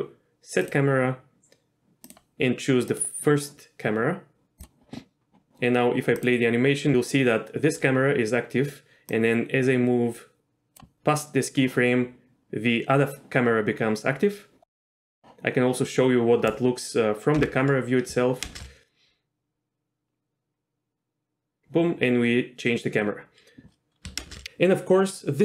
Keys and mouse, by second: 0.9-4.7 drag, 6.4-10.8 drag, 15.2 click, 17.5 KP_0, 18.6 shift+space, 24.4 shift+space.